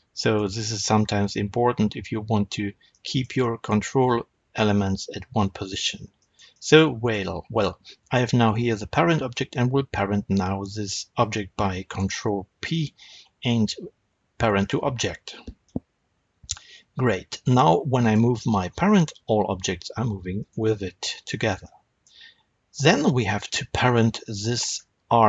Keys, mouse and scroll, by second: 2.5-2.8 scroll down 2, 7.0 scroll up 1, 11.9 ctrl+p, 17.9 click, 18.9 g, 20.4 right click, 21.0-24.1 shift+middle drag, 24.1 click, 24.7-25.2 scroll up 1.